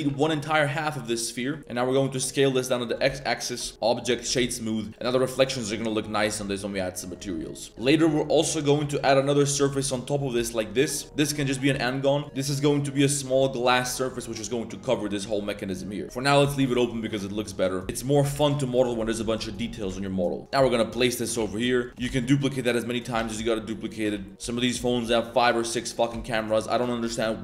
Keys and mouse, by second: 0.0 a, 0.4 middle click, 0.6 z, 0.8-1.1 middle drag, 1.6 s, 3.0 Tab, 3.1-3.4 middle drag, 3.6 middle click, 3.7 click, 4.2 a, 4.3 a, 4.4 drag, 4.9-7.1 middle drag, 7.3 middle click, 7.7 1, 7.7 shift+s, 7.8 middle click, 8.9 shift+d, 9.7 s, 10.3 f, 11.7 s, 13.9 middle drag, 14.1 z, 14.8 middle drag, 15.4 middle drag, 16.0 Tab, 16.0 z, 16.0 x, 16.5 click, 16.9 drag, 17.4 drag, 17.8 z, 18.3 g, 19.1 z, 21.3 g, 21.9 ctrl+z, 21.9 shift+s, 21.9 g, 22.0 shift+d, 23.2 shift+d, 24.1 s, 24.4 g, 25.0 shift+drag, 25.6 shift+click, 26.1 shift+drag.